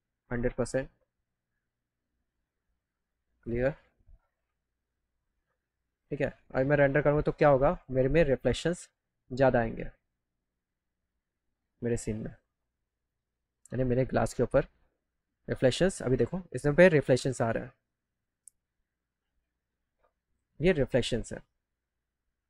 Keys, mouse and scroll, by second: 1.2 click, 2.2 click, 3.3 click, 4.5 click, 5.8 click, 6.4 scroll down 2, 7.6 click, 8.6 click, 12.9 click, 15.8 middle click, 16.8 scroll up 1, 17.7 scroll up 1.